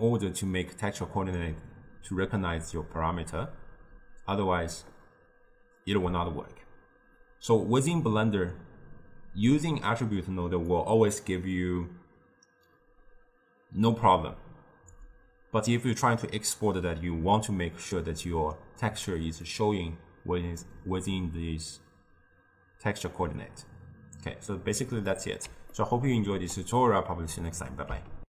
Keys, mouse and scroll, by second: 9.6 click, 19.6 click, 25.1-28.3 middle drag.